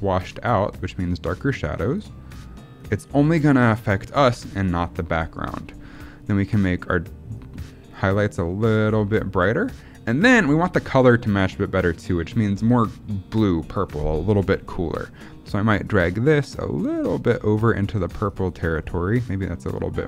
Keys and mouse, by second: 1.9 click, 2.7 click, 6.6 click, 7.2 click, 8.8 click, 9.5 click, 15.8 click, 16.9 click, 17.6 click, 18.2 click, 18.7 click, 19.7 click.